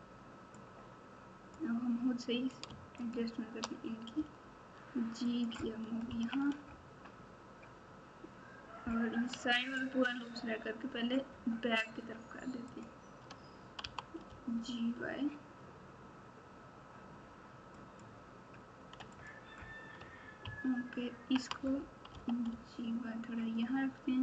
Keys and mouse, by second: 0.5 click, 0.8 click, 2.9 shift+click, 4.1 g, 6.0 KP_3, 12.7 alt+click, 13.8 g, 19.1 click, 20.4 ctrl+KP_6, 20.9 ctrl+KP_6, 22.1 g.